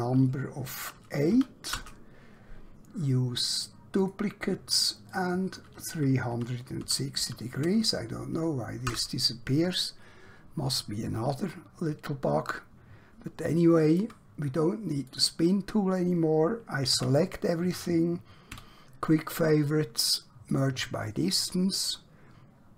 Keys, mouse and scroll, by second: 1.3 8, 1.7 Return, 4.0 click, 6.3-7.2 typing, 8.9 Return, 12.6 scroll down 1, 13.6 shift+middle click, 15.0 click, 16.9 a, 18.5 q, 20.4 click.